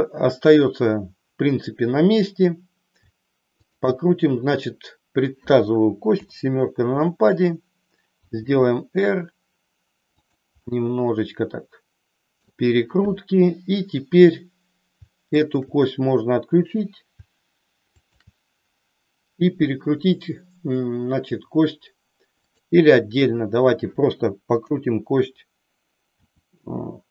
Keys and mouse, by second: 3.6-4.6 shift+drag, 6.1 KP_7, 8.1 r, 10.2 click, 10.7-12.5 middle drag, 15.4-16.5 shift+drag, 17.8-18.8 shift+drag, 24.6 KP_7, 26.1 r.